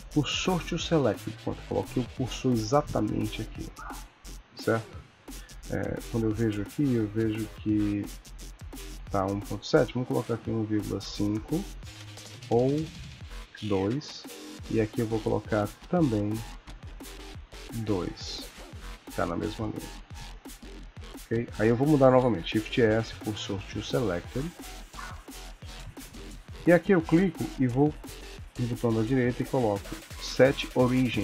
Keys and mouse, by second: 6.0 click, 9.4 click, 14.7 click, 16.6 click, 21.5 click, 22.4 shift+s, 26.5 click, 28.8 right click.